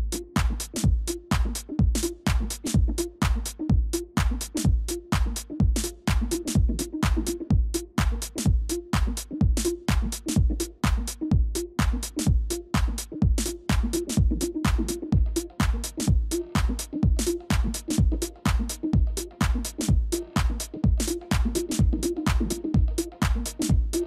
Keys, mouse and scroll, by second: 0.5 ctrl++, 12.2 typing, 14.0 typing, 17.4 typing, 20.0 typing, 23.2 typing, 23.2 ctrl+].